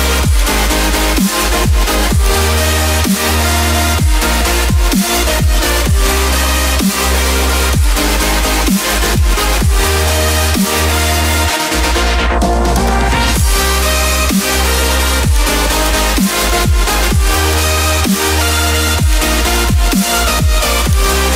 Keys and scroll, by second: 3.0 Return, 4.4 ctrl+j.